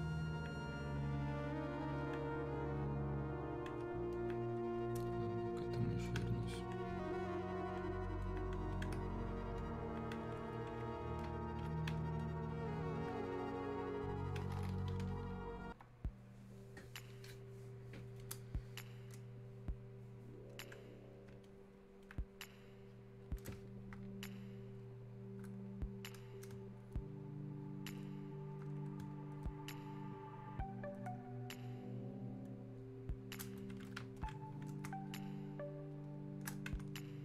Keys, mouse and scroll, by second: 0.3-4.1 alt+drag, 4.1-6.5 alt+drag, 6.5-8.3 drag, 8.3-16.7 alt+drag, 18.2-21.5 drag, 22.0-37.2 alt+drag.